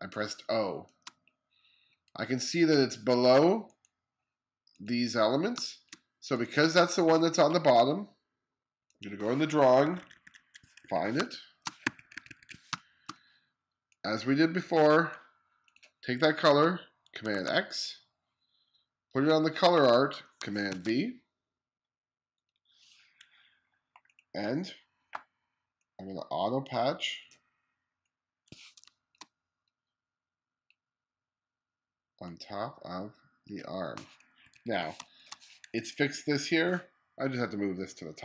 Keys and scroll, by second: 5.2 space, 9.6-12.3 typing, 16.9 super+x, 20.3 super+v, 28.4 space, 34.0 2, 34.5 space.